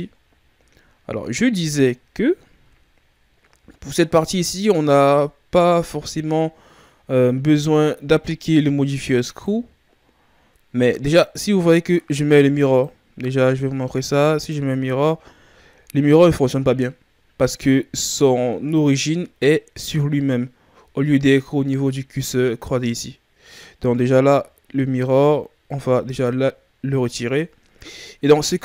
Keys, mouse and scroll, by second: 0.2-0.7 shift+scroll down 5, 0.9-3.9 ctrl+scroll down 1, 6.2-6.8 ctrl+scroll up 1, 6.8-9.2 scroll down 2, 9.2 click, 11.4-12.6 scroll up 1, 12.6 click, 15.3-16.7 ctrl+scroll up 4, 16.7-17.7 scroll up 1, 17.7-20.7 scroll down 6, 20.7-21.2 ctrl+scroll down 4, 21.2-22.0 shift+scroll up 1, 26.0 click, 27.1 ctrl+scroll up 1, 27.7-28.6 shift+scroll down 4.